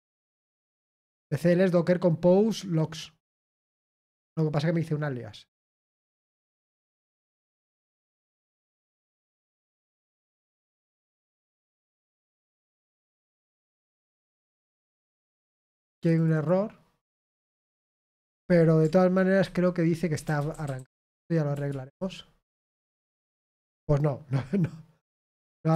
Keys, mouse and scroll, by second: 12.0 click, 13.0-16.8 drag, 17.9 click, 21.1-22.1 typing.